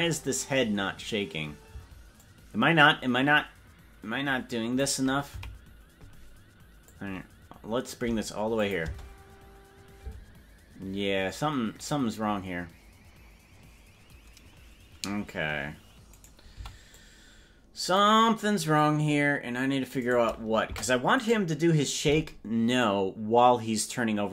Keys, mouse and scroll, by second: 2.0 space, 2.3-4.9 drag, 5.6 Left, 6.9-8.0 drag, 8.6 click, 8.8 space, 10.2 space, 16.2 right click, 16.6 c, 20.8 Delete.